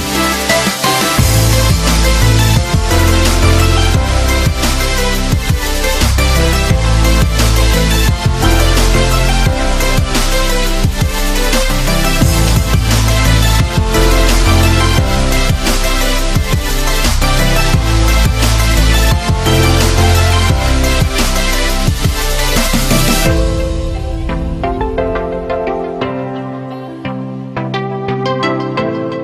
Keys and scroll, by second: 10.3 f, 12.5 z.